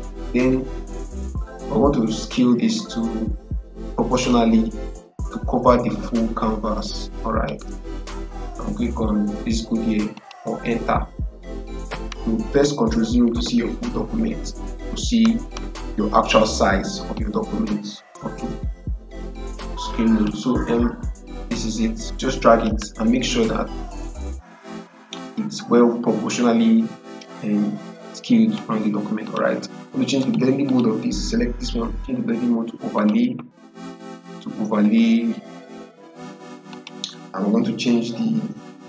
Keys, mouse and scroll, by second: 4.2-10.0 drag, 12.9 click, 13.2 ctrl+0, 17.0-25.0 drag, 25.0-29.1 drag, 32.9 click, 36.6 click.